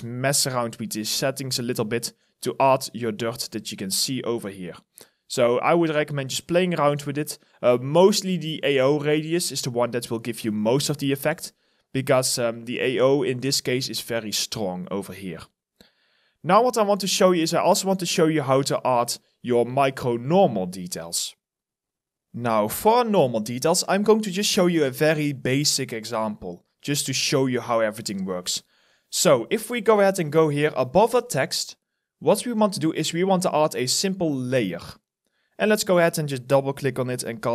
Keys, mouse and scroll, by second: 13.1 alt+click, 15.0 alt+right click, 15.7 alt+middle click, 16.2 alt+right click, 16.4 alt+click, 16.9 alt+middle click, 17.5 alt+right click, 19.3-19.8 scroll down 1, 24.1 alt+right click, 24.6 alt+click, 25.9 alt+right click, 35.8 double click, 37.3-37.5 typing.